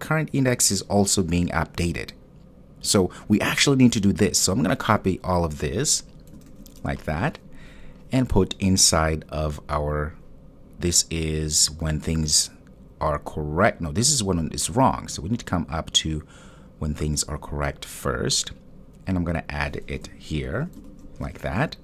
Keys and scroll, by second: 6.5 super+c, 7.0 super+c, 20.8 super+v.